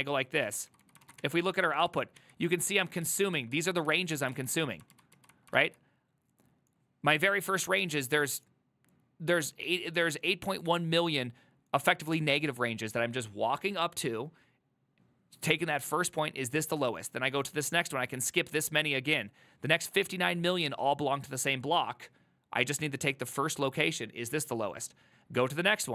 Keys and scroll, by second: 0.5-2.3 typing, 1.1 ctrl+a, 2.0 ctrl+a, 2.6 ctrl+u, 3.1 ctrl+u, 3.6 ctrl+u, 4.0 ctrl+u.